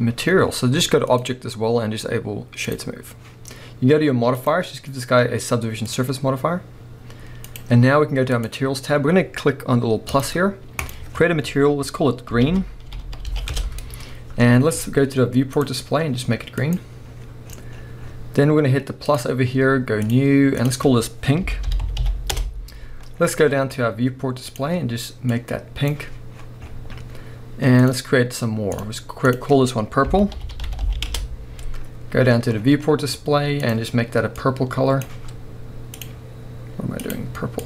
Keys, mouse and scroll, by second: 1.1-7.5 drag, 8.4 click, 10.1-15.6 drag, 13.0 e, 13.6 Return, 14.5-15.2 scroll down 1, 17.4-19.1 scroll up 1, 19.1-24.5 drag, 22.3 Return, 23.1-24.5 scroll down 1, 26.4-27.8 scroll up 1, 27.8-33.7 drag, 31.1 Return, 32.3-33.6 scroll down 1, 35.9 click.